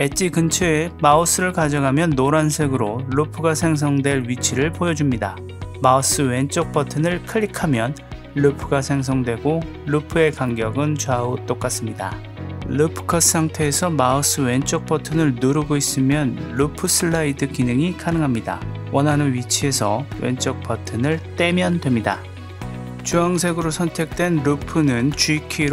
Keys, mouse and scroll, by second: 6.3 click, 15.2-20.3 drag, 23.6-25.1 drag.